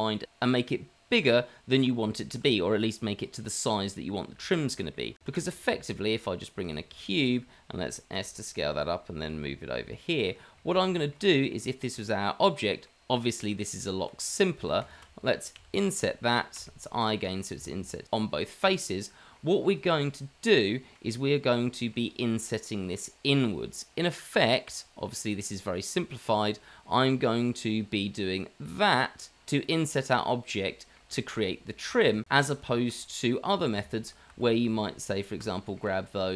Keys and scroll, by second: 5.4 shift+a, 7.2 shift+a, 8.1 s, 9.3 g, 11.1 g, 13.5 Tab, 15.0 Tab, 15.6 i, 32.1 ctrl+z, 32.9 ctrl+z, 34.2 ctrl+z, 34.5 ctrl+z.